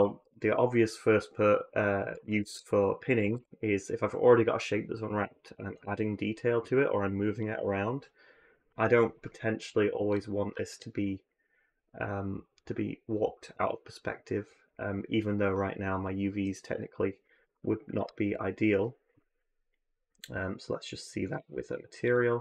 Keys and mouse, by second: 0.0 ctrl+z, 3.0 a, 3.1 a, 17.8 Tab.